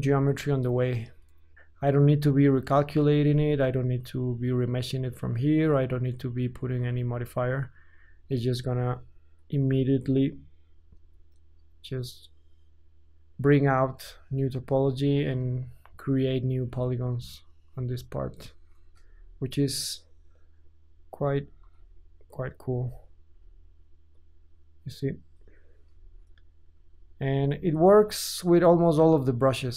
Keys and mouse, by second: 0.5 middle click, 1.1-6.1 drag, 6.1-10.1 middle drag, 10.1-18.1 drag, 19.0 shift+KP_5, 21.7 ctrl+z, 22.9-29.7 drag, 25.8 KP_5.